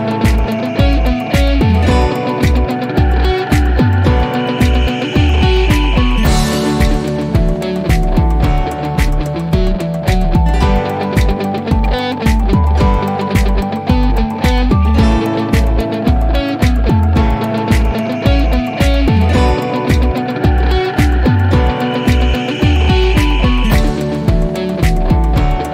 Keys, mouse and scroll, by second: 1.8 1, 2.2 Return, 5.7 typing, 7.5 Return, 10.7-12.4 typing, 14.3-14.9 click, 15.1 1, 15.9 Return, 19.3 click, 24.4-24.9 click, 25.3 1.